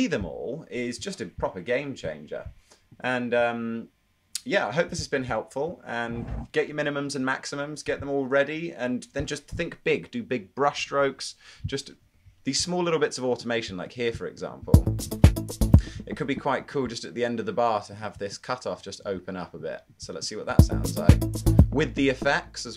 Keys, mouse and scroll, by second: 21.6 space.